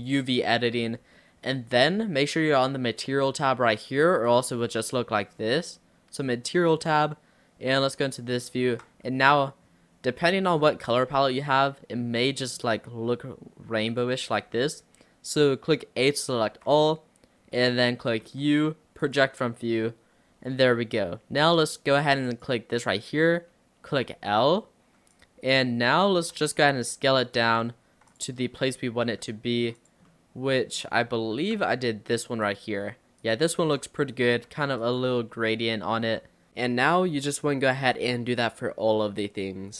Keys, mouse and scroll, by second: 0.0 click, 1.2-4.3 middle drag, 4.3 click, 4.8 middle click, 6.8 click, 8.4 middle click, 12.5-14.1 middle drag, 35.4-36.1 middle drag, 37.2 middle click, 37.5 middle drag.